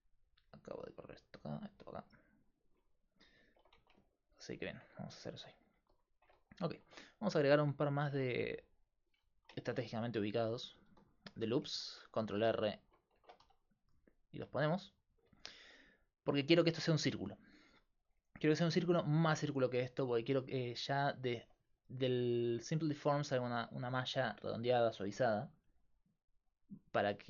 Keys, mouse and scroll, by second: 3.1 middle click, 3.8 Tab, 5.5 click, 6.8 ctrl+r, 8.1 ctrl+r, 10.0 ctrl+r, 10.9 ctrl+r, 13.2 ctrl+Tab, 14.5-16.3 middle drag, 16.7-18.4 middle drag, 19.7-22.6 middle drag, 22.6-27.2 drag.